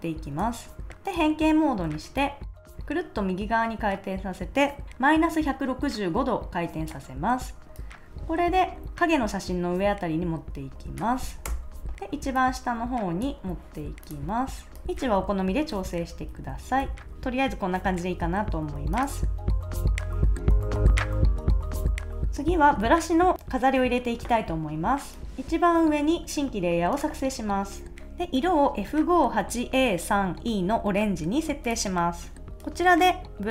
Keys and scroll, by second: 11.4 Return, 14.8 shift+Up, 15.5 shift+Down, 15.7 shift+Left, 16.3 shift+Right, 16.8 shift+Left.